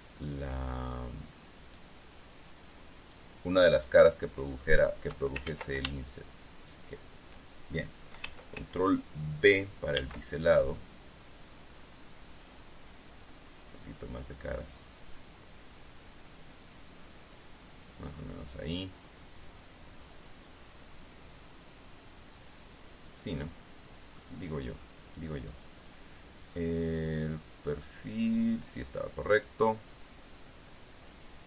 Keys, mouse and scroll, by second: 0.7 shift+right click, 2.2 shift+right click, 3.6 shift+right click, 4.9 shift+right click, 6.0 ctrl+shift+z, 7.4 shift+right click, 10.5 ctrl+b, 18.3 click, 18.7-25.0 middle drag, 25.4 middle click, 26.3-27.6 scroll up 1, 27.6 scroll up 1, 27.9-30.2 drag.